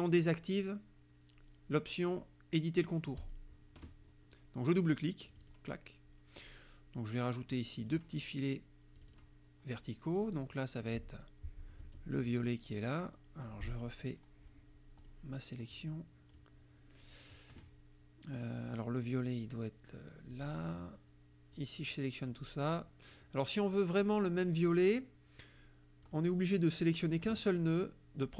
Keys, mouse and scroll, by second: 3.2 click, 5.3 click, 7.9 click, 9.0 click, 10.2 click, 11.9 F7, 15.1 click, 15.8 click, 20.4 click, 21.6 click, 26.1 click.